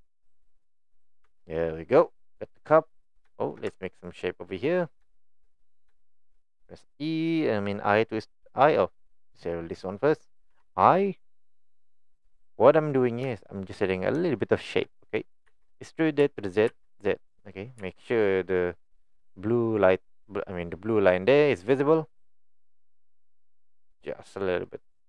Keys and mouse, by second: 1.3 Tab, 1.5-2.3 middle drag, 2.5 middle drag, 3.3 shift+middle drag, 3.7 Tab, 4.0 click, 5.1 middle click, 5.5 middle click, 6.0 middle click, 9.8 click, 13.3 shift+middle click, 14.5 shift+middle click.